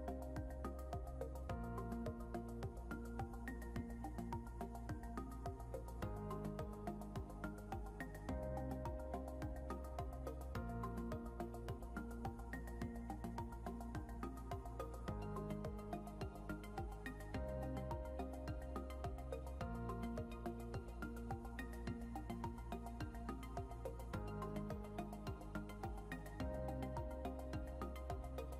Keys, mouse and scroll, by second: 11.6 Escape.